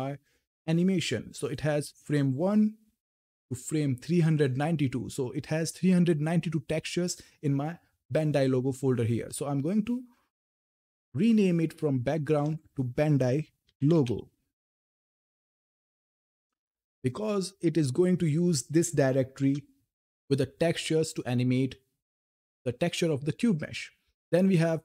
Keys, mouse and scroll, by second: 1.2 click, 2.1 scroll down 1, 4.0 click, 10.4 click, 13.1-16.3 typing, 16.7 Return, 18.0 click, 19.0 o, 19.3 Return.